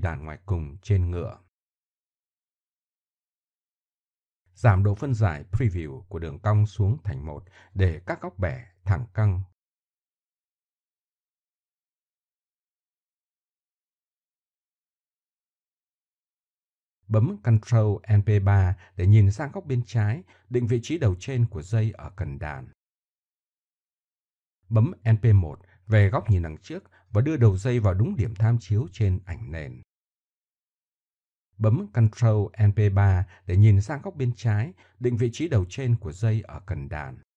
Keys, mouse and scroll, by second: 0.6-1.7 drag, 2.0 KP_3, 9.6 middle click, 11.8 KP_1, 14.2 middle click, 15.9-16.4 middle drag, 23.8 click, 24.6 middle click, 24.9 KP_1, 27.0 middle click, 28.1 click, 29.2 click, 30.2 click, 31.3 click, 33.8 right click, 35.6 r, 36.7 click.